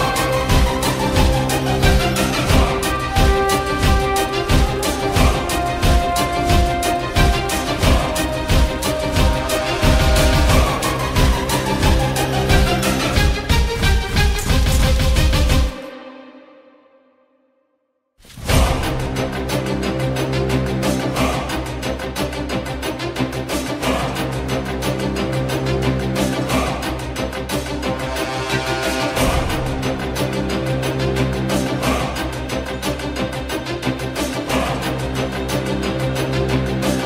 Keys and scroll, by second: 1.4 Delete, 1.7 F4, 2.4 ctrl+End, 8.1 3, 8.2 Return, 8.8 r, 11.6 Delete, 11.9 F4, 14.9 ctrl+a, 15.0 ctrl+e, 15.6 alt+Tab, 19.2 ctrl+z, 19.7 Delete, 20.3 ctrl+c, 20.5 alt+Tab, 21.1 ctrl+v, 21.2 Return, 22.8-25.2 typing, 30.5 ctrl+shift+s, 30.9 alt+Tab, 31.8 ctrl+c, 31.9 alt+Tab, 32.3 ctrl+v, 32.4 Return, 33.2-36.0 typing.